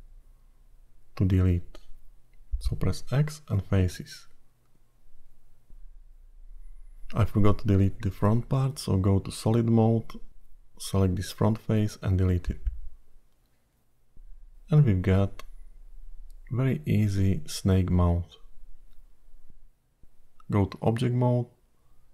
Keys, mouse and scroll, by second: 0.8 middle click, 2.8 x, 5.6 middle click, 7.9 3, 8.2 click, 9.8 shift+z, 10.7 click, 13.5 x, 14.8 middle click, 18.7-19.7 scroll down 8, 19.7 middle click, 20.8 Tab.